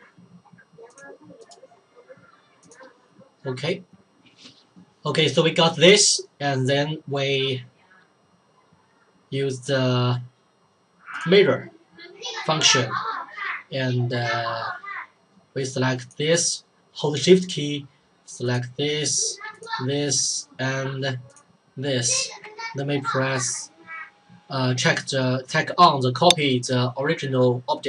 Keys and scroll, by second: 3.9 ctrl+z.